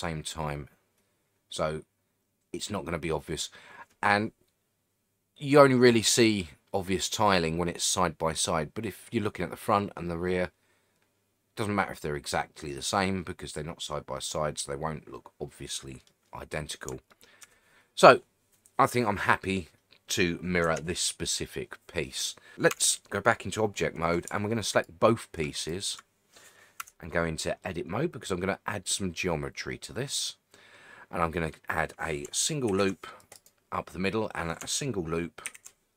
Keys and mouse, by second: 17.1-17.4 shift+middle drag, 20.6 Tab, 22.7 Tab, 26.8 Tab, 27.6-31.5 middle drag, 32.7 ctrl+r, 33.3 right click, 35.5 ctrl+r.